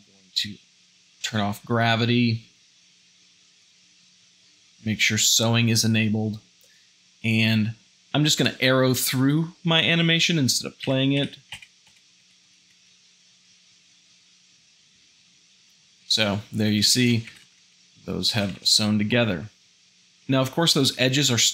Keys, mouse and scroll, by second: 11.2 Right, 13.5 shift+z, 14.4 Right, 16.8 Right.